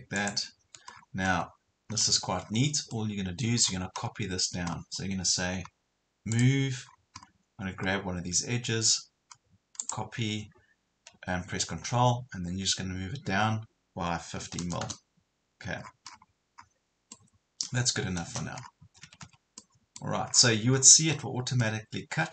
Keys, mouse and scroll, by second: 0.2 ctrl+click, 1.0-1.3 scroll down 1, 1.3 middle click, 2.4 scroll down 1, 3.0 middle click, 3.6 scroll up 2, 6.4 click, 6.9 scroll up 1, 7.9 scroll down 1, 9.8 click, 14.4 KP_5, 15.8 scroll down 1, 17.2 middle click, 18.3 scroll up 1, 18.8 Escape, 19.6 middle click, 20.4 scroll down 1, 20.7 scroll up 1, 21.6 middle click.